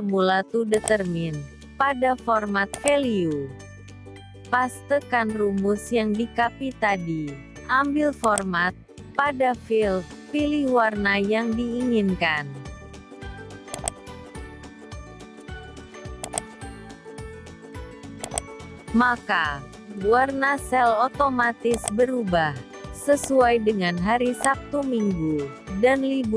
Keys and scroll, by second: 3.5 ctrl+v.